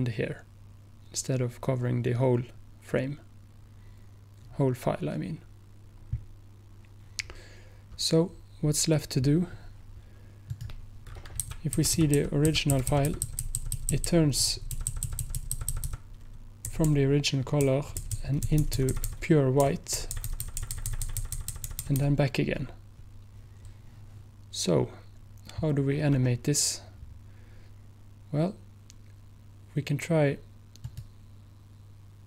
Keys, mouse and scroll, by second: 10.6 click, 11.6 click, 11.8 click, 16.5 click, 30.9 click, 31.9-32.2 drag.